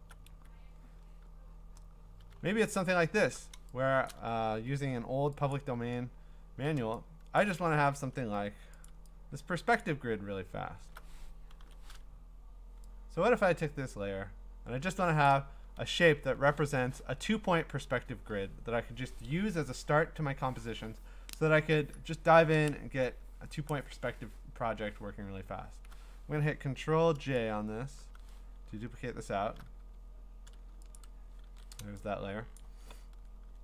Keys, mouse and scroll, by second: 0.1 alt+Tab, 1.4-1.8 scroll down 6, 1.8-3.5 scroll up 15, 3.5 scroll, 4.1 click, 5.5 click, 6.1-6.8 scroll, 7.4 click, 7.6-9.2 typing, 8.8 ctrl+click, 9.8 ctrl+click, 10.1 scroll down 4, 10.5-11.6 scroll up 7, 13.8 scroll, 15.2 click, 15.8-16.6 scroll, 26.1 scroll up 10, 27.9 scroll, 28.0 ctrl+j, 28.9-29.6 scroll, 31.0 ctrl+click, 31.5 ctrl+d, 32.7 click, 32.9-33.6 scroll.